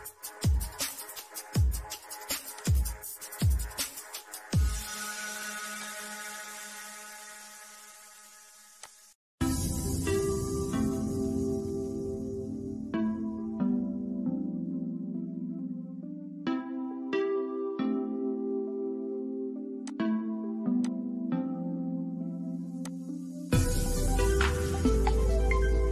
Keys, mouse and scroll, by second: 5.0 click, 8.0 click, 9.0 scroll down 1, 9.5 scroll up 1, 10.2 shift+middle click, 12.0-12.4 scroll down 1, 12.4 shift+middle click, 13.4-13.7 scroll down 1, 15.1 scroll up 1, 16.8-19.1 shift+middle drag, 19.1 click, 22.5-25.9 middle drag.